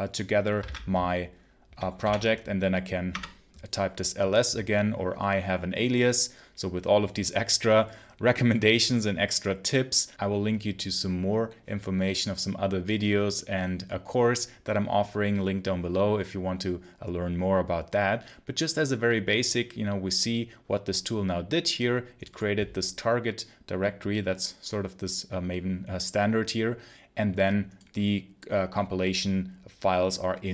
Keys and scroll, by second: 0.5 ctrl+c, 1.9 l, 3.0 Return.